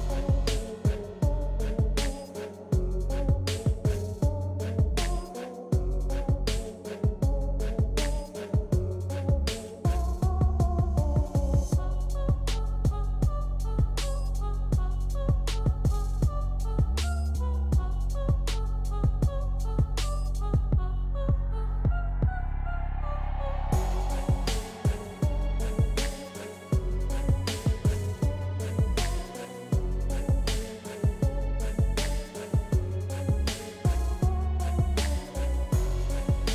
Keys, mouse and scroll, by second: 12.6 space, 12.9 click, 13.1 space, 15.3-22.7 drag, 22.7 space, 22.9 click, 23.1 space, 24.9 click, 24.9 space, 26.7 click, 26.9 space, 28.5 click, 28.9 space, 30.2-33.5 drag, 33.5 space, 33.7 click, 34.0 space, 34.9-36.5 drag.